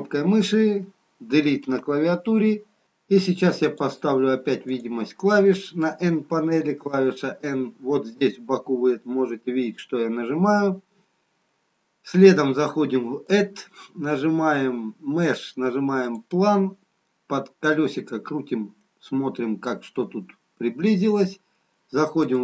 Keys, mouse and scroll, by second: 6.3 n, 13.2 click, 17.1-17.8 scroll up 3, 18.2 middle click, 18.2-18.6 scroll up 2, 22.3 click.